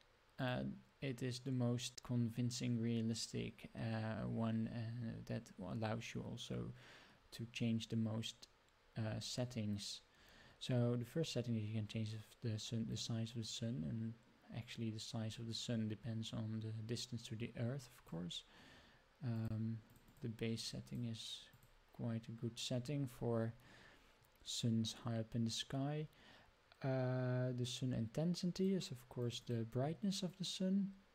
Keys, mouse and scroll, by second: 12.9-18.2 drag, 19.3 click, 19.9 click, 20.0 click, 20.6 click, 20.9 click, 21.5 click, 28.5 click, 29.2 click, 30.3-31.1 drag.